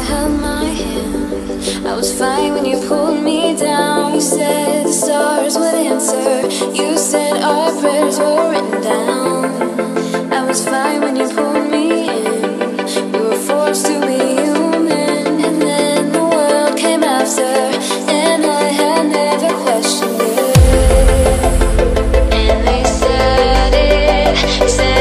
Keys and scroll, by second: 16.8 super+-, 17.2 super+-, 17.7 super+=.